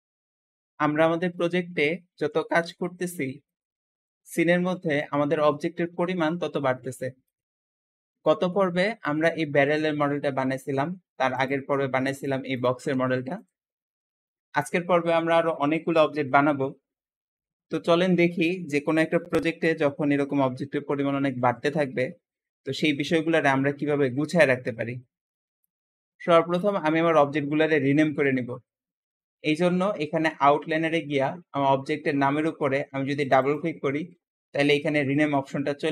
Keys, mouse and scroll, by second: 0.7-6.2 middle drag, 6.2 g, 7.5-7.9 scroll down 2, 7.9 middle click, 8.6-9.1 scroll up 3, 11.2 click, 11.8 scroll down 2, 12.0 click, 12.4 click, 12.7 g, 26.4 click, 33.0 click, 33.3-34.3 drag.